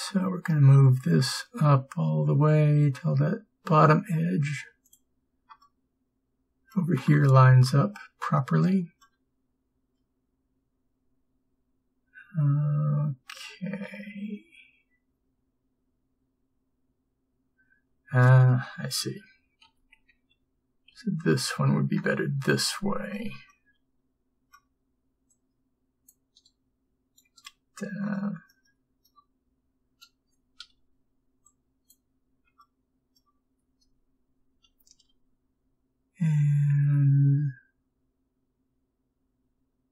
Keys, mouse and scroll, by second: 9.1-18.7 middle drag, 19.7 ctrl+m, 26.5 right click, 32.7 b, 32.7 middle click, 34.7 click, 35.0 g.